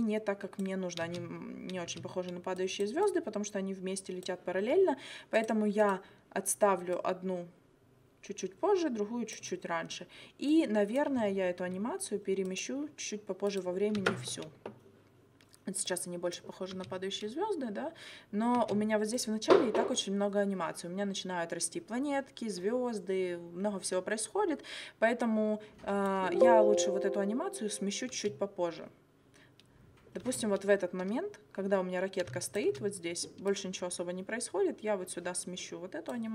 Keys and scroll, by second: 1.0 space, 14.0 space, 16.7 space, 18.6 space, 26.3 space, 28.1 space, 30.2 space.